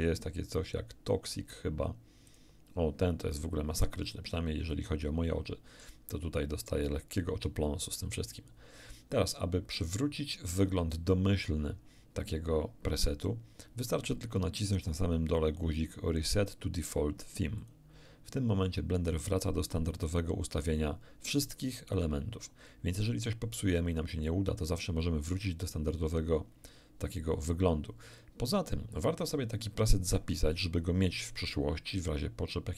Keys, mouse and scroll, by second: 2.3 click, 4.2-6.6 drag, 17.6 click, 21.9-23.9 drag.